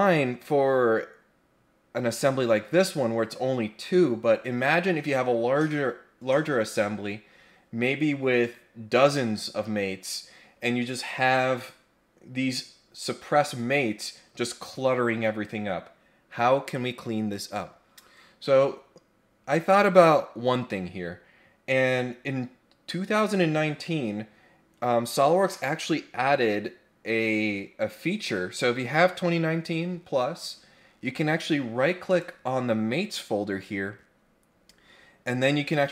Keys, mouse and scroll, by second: 32.1 right click.